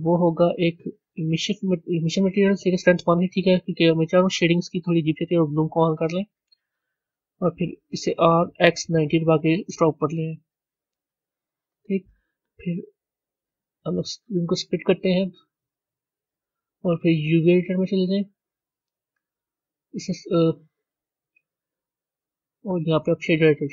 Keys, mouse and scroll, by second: 0.0-3.0 drag, 3.9 click, 5.4 click, 6.9 click, 7.9 r, 10.6-13.5 middle drag, 13.5-19.3 drag, 22.6-23.7 drag.